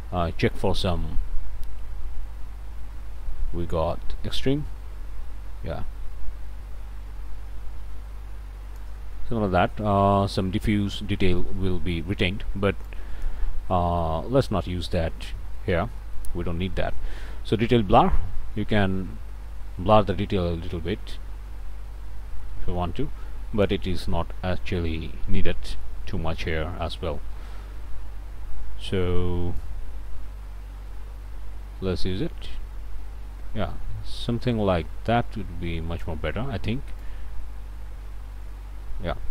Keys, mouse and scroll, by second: 9.2 middle click, 9.7 click, 12.9 click, 14.5 click, 15.6 click, 16.0 click, 18.0-24.1 drag, 24.1-24.5 scroll up 1, 25.0 scroll down 1, 25.2 click, 29.6-36.2 drag, 37.0-38.6 drag, 39.0-39.3 scroll down 4.